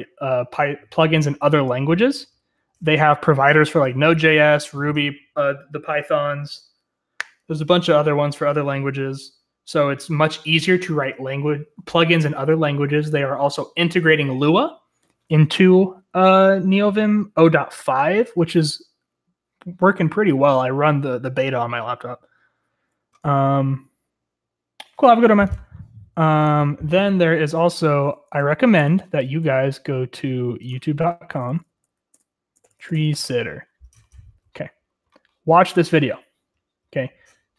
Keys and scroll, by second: 1.8 j, 2.0-3.0 j, 28.1-29.1 typing, 32.7-34.4 typing.